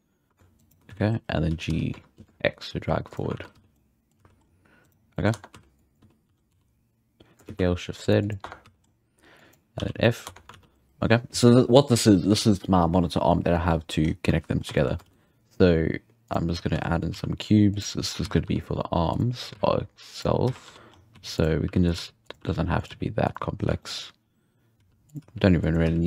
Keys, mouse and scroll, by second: 0.9 z, 1.5 g, 3.3 alt+a, 3.5 z, 3.7 scroll down 1, 3.7-4.3 middle drag, 4.1 z, 4.4-4.8 scroll up 5, 4.8 right click, 4.9 scroll down 1, 5.1 middle click, 5.3 Tab, 5.5 z, 5.7 click, 5.9 z, 6.3 a, 6.5 s, 8.4 Tab, 8.7 scroll down 2, 8.8-9.1 middle drag, 9.1 Tab, 9.5 click, 9.8 f, 10.0 middle click, 10.2 Tab, 10.5 alt+a, 10.7 scroll down 1, 14.0-14.4 scroll up 1, 14.4-14.7 scroll down 1, 14.7-16.3 shift+middle drag, 15.0 shift+a, 16.5-17.3 scroll down 3, 16.7 z, 17.1 s, 18.2 s, 20.4-22.9 typing, 20.9 scroll up 1, 23.5 scroll up 1, 23.7-24.2 shift+middle drag, 24.2-24.7 scroll up 2, 24.7 s, 25.2 g, 25.8 x.